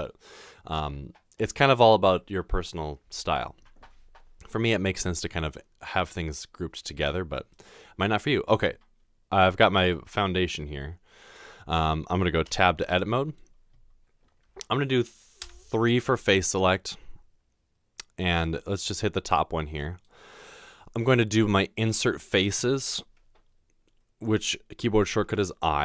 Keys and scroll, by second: 12.5 Tab, 15.4 typing.